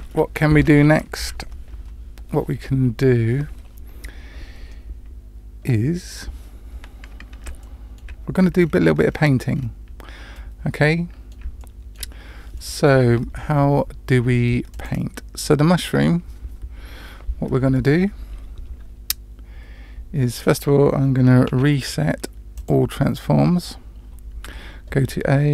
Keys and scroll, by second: 21.5 ctrl+a, 24.4 Tab.